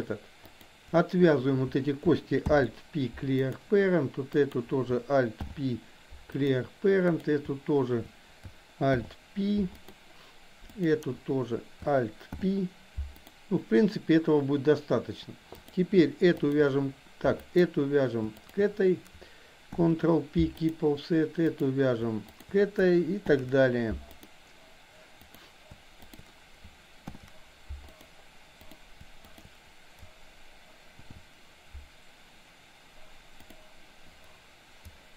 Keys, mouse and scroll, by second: 0.6 click, 2.4 alt+p, 4.4 click, 7.2 click, 8.9 alt+p, 10.8 click, 12.3 alt+p, 15.7 click, 16.6 shift+click, 17.4 click, 18.4 shift+click, 21.6 click, 22.3 click, 23.2 ctrl+p, 25.3 click, 26.1 click, 27.1 ctrl+p, 28.7 click, 29.2 shift+click, 31.1 ctrl+o.